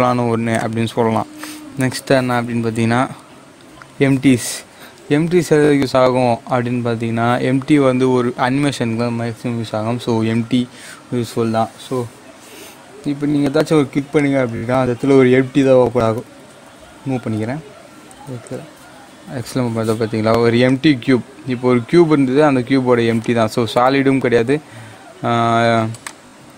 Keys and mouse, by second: 0.5-2.6 drag, 2.6 shift+a, 14.1 shift+a, 14.3 click, 16.0-17.2 typing, 18.2 x, 20.7 click, 23.2 click, 26.0-26.5 drag.